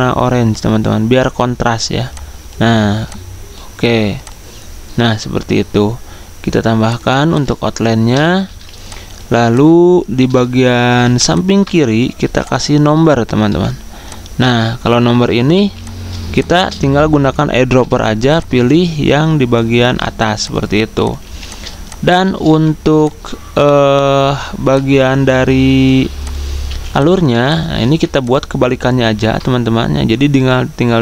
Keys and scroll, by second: 9.8 z, 10.9 v, 17.1-17.9 typing, 19.9 v, 21.2 z, 22.2-23.0 typing, 26.6 z.